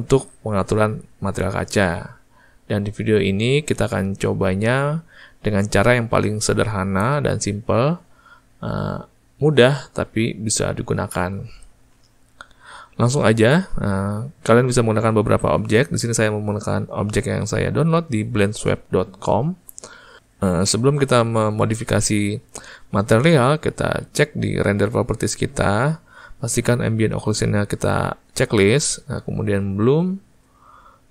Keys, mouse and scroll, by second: 18.2 click, 28.5 click, 29.9 click.